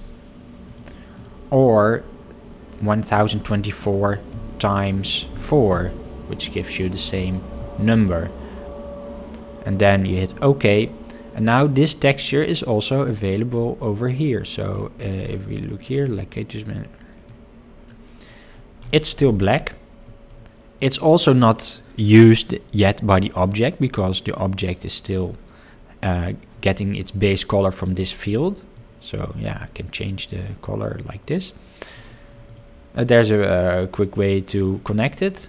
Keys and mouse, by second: 20.1 middle click, 22.8-23.3 middle drag, 23.9 middle click, 32.6 click.